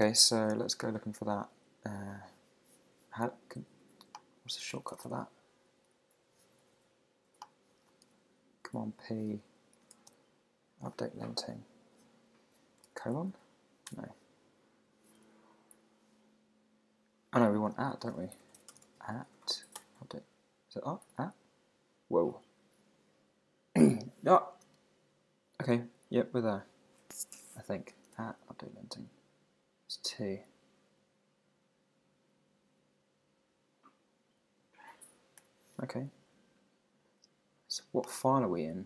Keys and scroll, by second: 0.5 super+c, 4.7 alt+BackSpace, 8.0 super+p, 10.1 super+v, 15.2 super+Left, 15.7 super+Right, 17.8 super+Left, 18.3 Right, 19.8 Return, 21.0 Right, 28.1 shift+2, 28.3 super+v, 29.2 Down, 34.5 Up, 35.4 Return.